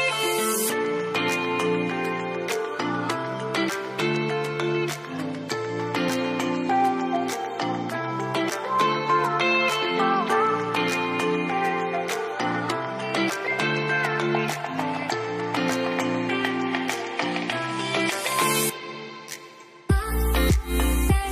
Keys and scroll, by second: 4.4-6.9 typing, 5.2 ctrl+a, 8.3-11.3 typing.